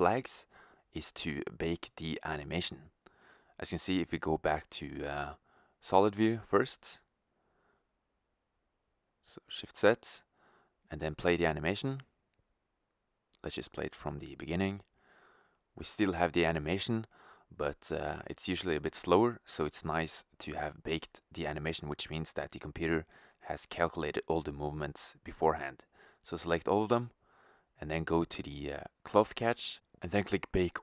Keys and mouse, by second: 1.0-2.2 drag, 3.6-5.7 middle drag, 9.0 shift+z, 12.0 click, 20.5 middle click, 21.7-22.7 middle drag, 22.7-24.1 right drag, 23.6 ctrl+z, 26.9-27.7 drag, 27.8-30.8 drag.